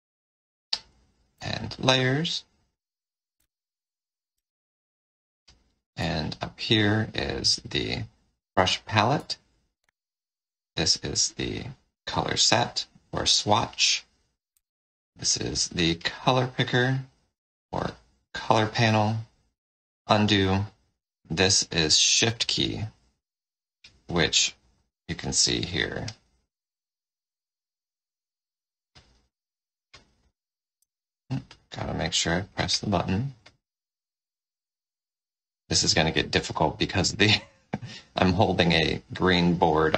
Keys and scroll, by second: 1.3 F7, 4.2 space, 6.0 F8, 9.1 F8, 9.7 F9, 13.7 F9, 14.5 F6, 18.8 F6, 39.7 Return.